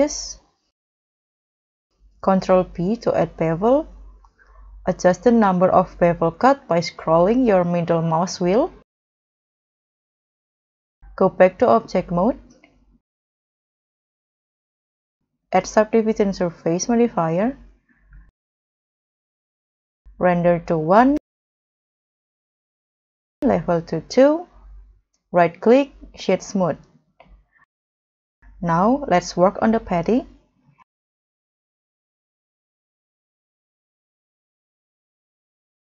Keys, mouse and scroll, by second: 1.0 middle click, 1.9 middle click, 2.0 ctrl+b, 9.7 middle click, 10.1 scroll down 4, 10.6 scroll up 1, 17.5 scroll up 4, 18.0 middle click, 19.2 middle click, 20.8-21.7 scroll down 7, 21.2 middle click, 21.2 middle click, 21.9-24.3 scroll up 5, 25.3 scroll up 1, 25.3 right click, 26.8 scroll down 1, 27.1 middle click, 27.4 middle click, 28.3 middle click, 28.3-28.7 scroll down 2, 28.8 middle click, 29.2-29.7 scroll up 1, 30.2 scroll up 2, 33.8 g, 34.1 z, 35.3 scroll up 2.